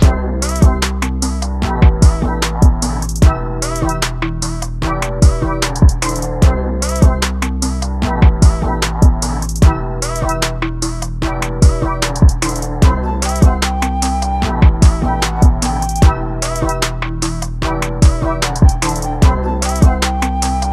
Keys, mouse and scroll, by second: 0.0 middle click, 0.5 click, 0.6 middle click, 0.7 click, 0.8 middle click, 1.1 click, 1.2 s, 1.5 middle click, 1.7 click, 1.9 shift+middle click, 1.9 scroll up 4, 2.0 scroll down 2, 2.1 middle click, 2.1 scroll up 1, 2.2 scroll down 1, 2.4 middle click, 2.4 click, 2.6 g, 2.9 click, 3.1 click, 3.4 s, 3.7 scroll down 3, 3.8 scroll up 3, 3.9 middle click, 4.0 click, 4.2 scroll down 1, 4.3 scroll up 1, 4.4-5.2 scroll down 1, 5.2 scroll up 1, 5.2 scroll down 1, 5.3 KP_7, 5.4 scroll up 1, 5.5 shift+middle click, 5.8 scroll down 1, 6.0 scroll up 1, 6.3 ctrl+r, 6.9 scroll down 2, 7.0 Tab, 7.1 Tab, 7.3 1, 7.4 middle click, 7.6 2, 7.9 ctrl+b, 8.2 click, 8.5 g, 8.8 scroll down 2, 8.9 middle click, 9.0 scroll up 3, 9.1 middle click, 9.2 click, 9.7-10.3 scroll down 5, 9.8 middle click, 10.0 Tab, 10.3 right click, 10.4 scroll up 2, 10.5 click, 10.7 Tab, 11.2 Tab, 11.3 shift+middle click, 11.6 1, 11.6 middle click, 11.7 click, 11.9-12.4 scroll down 4, 12.1 alt+a, 12.3 middle click, 12.4 middle click, 12.6-13.4 scroll up 4, 12.6 click, 13.1 Tab, 13.4-14.6 middle drag, 14.6-15.1 scroll up 3, 14.7 middle click, 15.1 middle click, 15.9 click, 15.9 middle click, 16.5 2, 16.7 click, 16.9-17.5 scroll down 3, 17.1 middle click, 17.5 middle click, 18.3 scroll up 1, 18.5-20.7 middle drag.